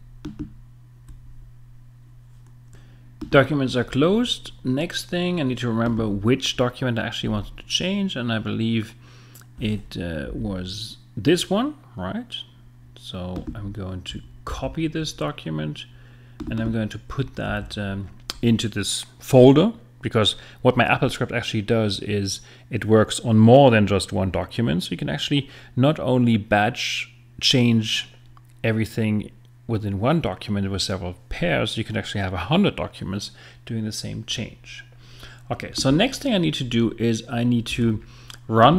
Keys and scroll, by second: 7.2 space, 10.2 Up, 14.5 super+c, 17.5 super+v, 37.7 space.